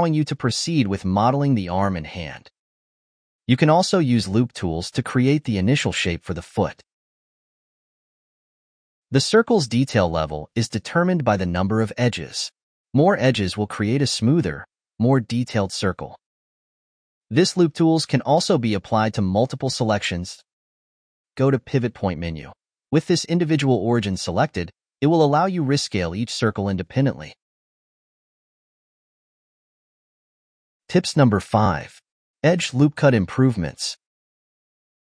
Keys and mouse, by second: 0.0-0.6 typing, 0.9 middle click, 1.5 ctrl+Tab, 1.8-3.3 shift+middle drag, 3.3 Tab, 3.8 click, 4.2 2, 4.3 click, 4.7 alt+shift+click, 5.5-7.2 right drag, 7.4-8.7 middle drag, 9.0 shift+click, 9.2 shift+click, 9.4 shift+click, 9.9-11.4 right drag, 11.4 click, 11.7 shift+click, 11.9 shift+click, 12.2 shift+click, 12.5 shift+click, 12.7 shift+click, 13.0 shift+click, 13.2 shift+click, 13.4 shift+click, 13.8-15.6 right drag, 15.6 click, 16.6 click, 16.8 shift+click, 17.2 shift+click, 17.8 shift+click, 18.0 shift+click, 18.8-20.6 right drag, 21.8-24.0 drag, 25.3 s, 30.8-33.5 middle drag, 34.3-35.0 shift+middle drag.